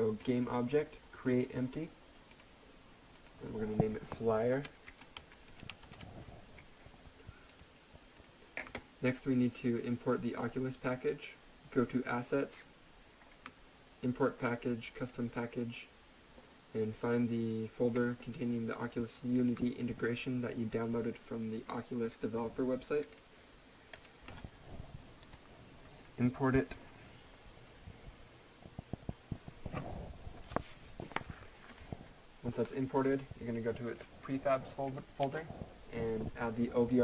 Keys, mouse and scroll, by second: 0.2 right click, 1.9 click, 4.6-6.3 typing, 7.5 click, 12.2 click, 14.9 click, 23.1 click, 32.6 click, 36.9 click.